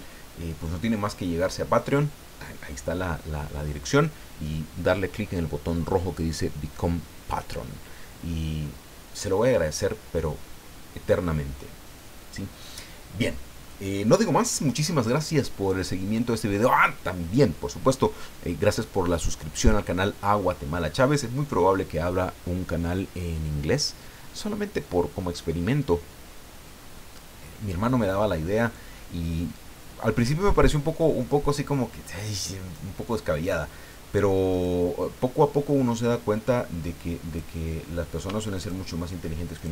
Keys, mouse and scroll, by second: 34.5 right click, 35.9-37.5 drag, 38.5 shift+right click, 39.6 shift+right click.